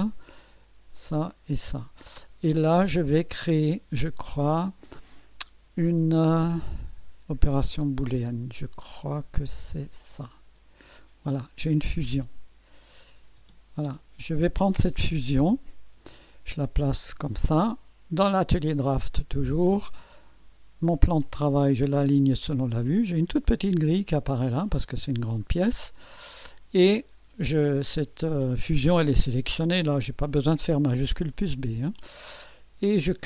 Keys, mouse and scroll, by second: 0.9 ctrl+click, 1.5 ctrl+click, 9.9 click, 11.2 scroll down 1, 12.8 click, 13.4 space, 15.5 right click, 17.0 scroll up 1, 20.2 click, 21.9 click, 25.5 scroll down 1, 26.2 right click, 29.1 click.